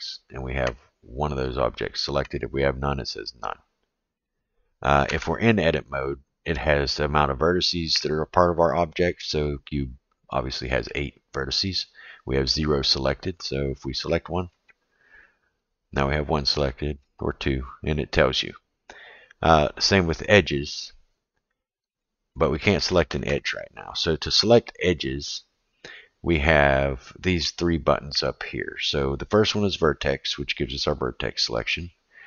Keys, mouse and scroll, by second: 0.7 click, 4.1 click, 5.1 Tab, 9.4-10.9 middle drag, 14.0 click, 14.5 click, 16.7 click, 21.9 click, 22.3 click, 22.7 click, 23.0 click, 23.3 click, 23.5 click, 29.1 click, 30.1 click.